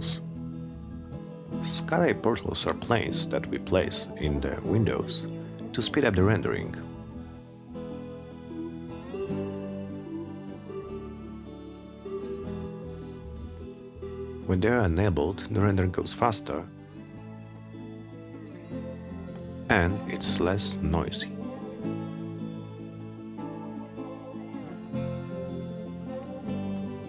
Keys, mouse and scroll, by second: 3.1 click, 3.8 click, 5.5 click, 8.1 click, 21.9 click, 23.6 click, 25.8 click.